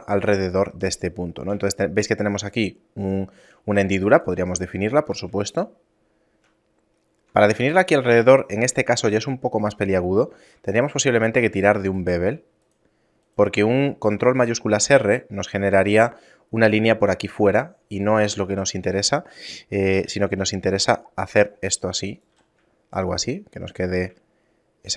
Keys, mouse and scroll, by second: 0.6 ctrl+2, 1.7 shift+middle click, 3.9 ctrl+r, 5.5 shift+middle click, 10.7 alt+right click, 11.9 shift+right click, 12.7 shift+right click, 13.3 shift+right click, 13.8 shift+middle click, 18.3 shift+middle click, 19.9 ctrl+b, 22.3 z, 22.9 shift+middle click, 23.9 z, 24.3 shift+middle click.